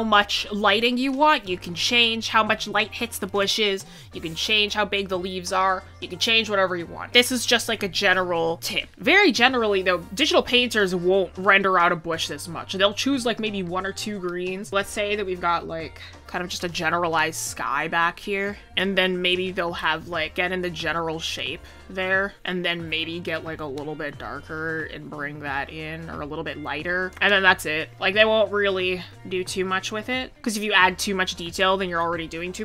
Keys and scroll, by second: 24.6 ctrl+z.